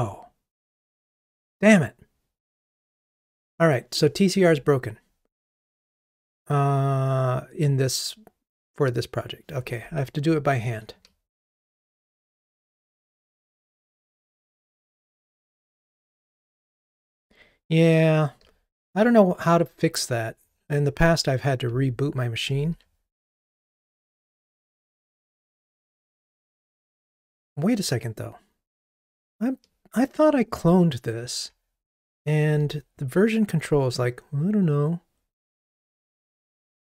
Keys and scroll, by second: 10.9 super+z, 13.4 ctrl+r.